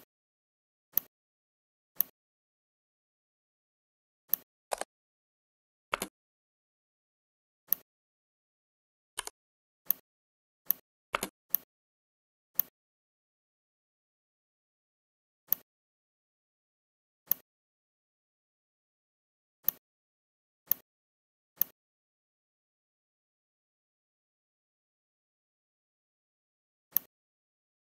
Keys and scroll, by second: 5.8 space, 11.1 space.